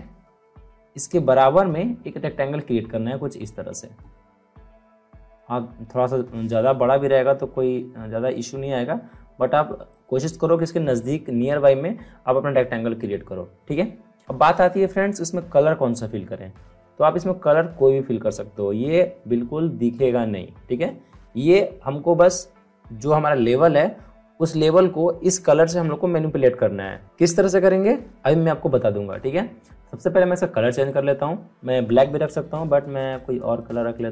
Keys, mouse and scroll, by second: 0.5-2.3 alt+scroll up 2, 2.9-12.5 drag, 30.7 click, 33.4 click.